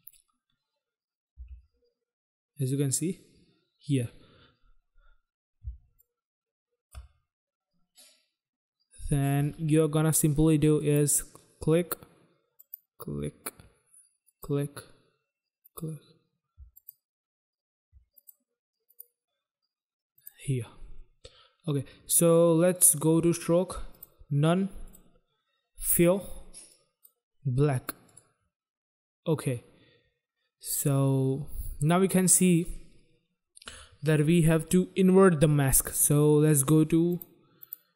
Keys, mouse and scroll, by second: 1.2 g, 3.4-4.0 scroll down 1, 4.0-4.7 scroll up 1, 4.7 scroll down 1, 5.6 space, 6.0 click, 6.1 space, 6.2 space, 6.3 space, 10.7 click, 12.5 click, 14.2 click, 15.6 click, 16.6 shift+click, 18.2 click, 18.8 click, 20.0 click, 22.7 click, 23.8 click, 24.8 click, 25.8 click, 26.7 click, 28.1 click, 32.1 click, 37.0 click, 37.6 click.